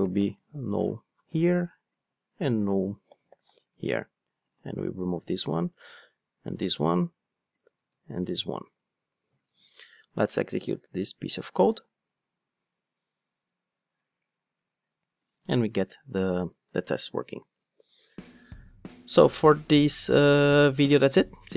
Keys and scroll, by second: 4.5 super+x, 11.2 ctrl+shift+d.